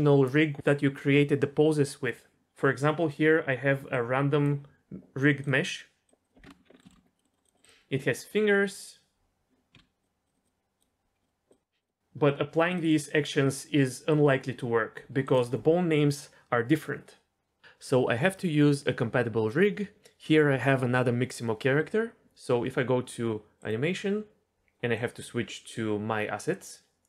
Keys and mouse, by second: 6.2 click, 9.7 Tab, 10.0-10.8 drag, 11.5-12.1 drag, 25.0-26.7 drag.